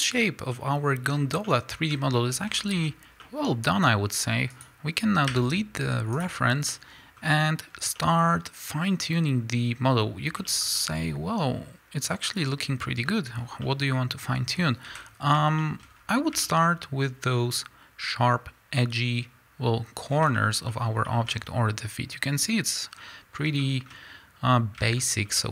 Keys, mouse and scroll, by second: 1.1-1.5 scroll up 2, 4.6 click, 6.2 x, 6.7-13.6 middle drag, 7.2-7.7 scroll up 2, 7.7 scroll down 2, 10.0-10.5 scroll up 1, 13.4 scroll down 2, 14.9 KP_1, 15.6 shift+middle click, 15.9 scroll up 1, 16.6-17.9 shift+scroll up 1, 20.1 scroll down 1, 20.4-25.5 shift+middle drag, 21.3-22.9 scroll up 3, 22.9-23.6 scroll down 2, 23.6 scroll down 1.